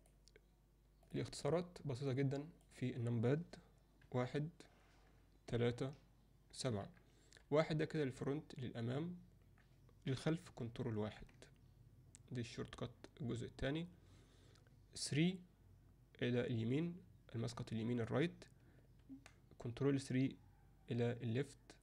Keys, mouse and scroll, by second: 0.0-1.2 drag, 2.1-2.6 drag, 4.0 KP_1, 5.5 KP_3, 6.5 KP_7, 7.4 KP_1, 11.0 ctrl+KP_1, 15.1 KP_3, 19.0 ctrl+KP_3.